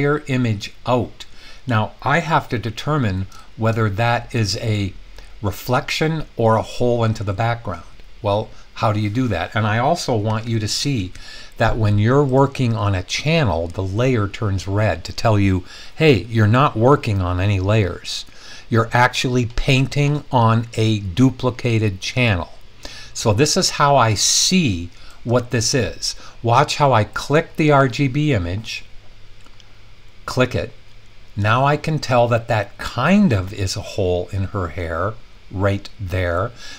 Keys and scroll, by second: 10.0-11.1 typing.